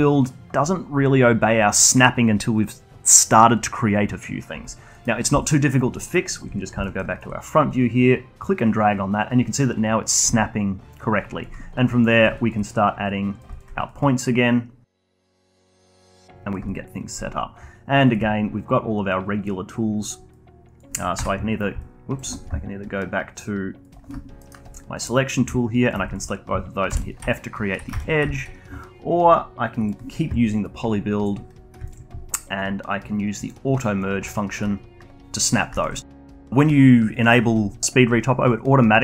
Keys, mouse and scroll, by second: 4.9 middle click, 5.4 alt+click, 5.9 alt+middle click, 6.3 alt+click, 6.5 scroll down 1, 6.8 alt+middle click, 7.1-18.1 alt+drag, 18.6-19.5 scroll up 1, 19.5-20.3 scroll up 1, 20.3 click, 21.1 q, 21.8-24.4 alt+drag, 24.4 alt+middle click, 25.3 click, 25.8 shift+click, 26.1 alt+click, 26.9 f, 27.3 alt+click, 27.9 ctrl+z, 28.3-34.9 alt+drag, 34.9-35.7 scroll up 1, 35.7-38.7 alt+drag.